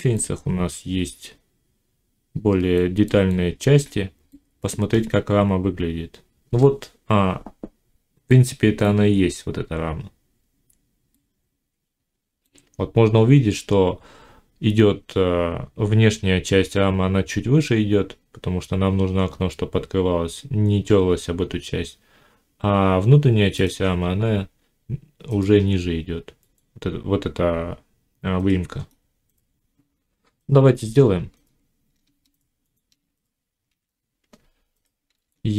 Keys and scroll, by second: 33.5 1, 35.0 shift+a.